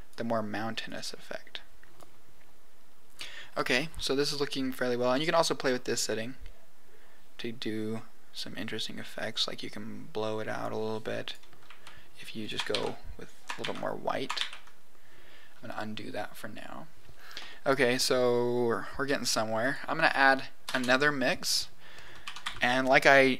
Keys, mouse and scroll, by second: 0.8-2.0 drag, 5.1 click, 11.2 click, 12.4 click, 12.7 ctrl+z, 13.5 ctrl+z, 14.4 ctrl+z, 17.4 middle click, 18.6 click, 19.5 click, 20.6 shift+a.